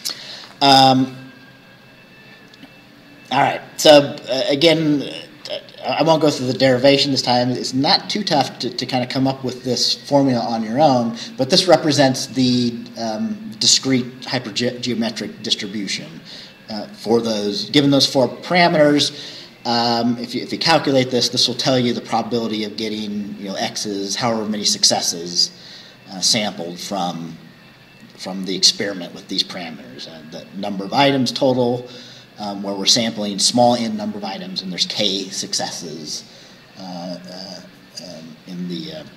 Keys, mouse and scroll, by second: 1.5-1.9 scroll down 2.